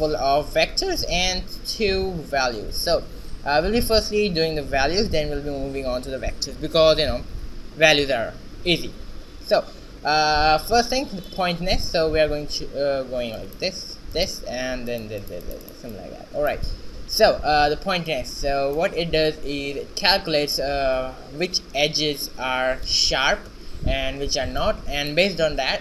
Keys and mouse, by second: 11.3-13.1 drag, 13.4-15.1 drag, 15.7 click.